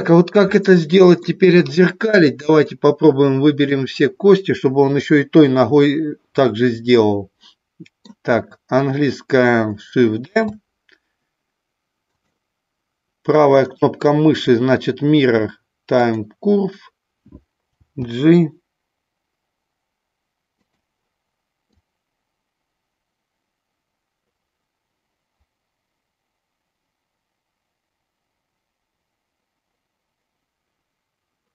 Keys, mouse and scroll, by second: 2.6-3.7 drag, 6.9-8.1 middle drag, 10.2 shift+d, 13.6-16.3 right drag, 17.7 g, 20.5 click, 21.7-31.5 drag.